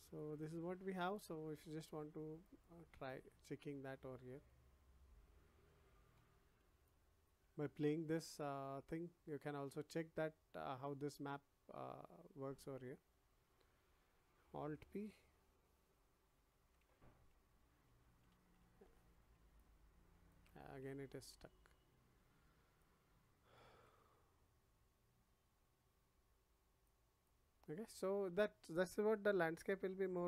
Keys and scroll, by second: 16.3 alt+p, 17.8 Escape.